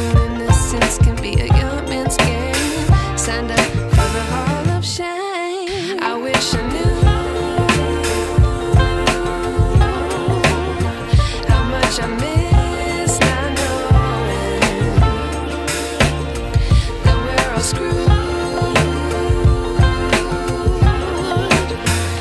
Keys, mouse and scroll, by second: 0.0-2.0 shift+drag, 3.7 ctrl+e, 4.2 space, 4.4 click, 4.7-5.0 space, 5.1 click, 5.9 ctrl+e, 7.1 click, 8.2 ctrl+r, 10.9-16.2 drag, 18.7-19.3 drag.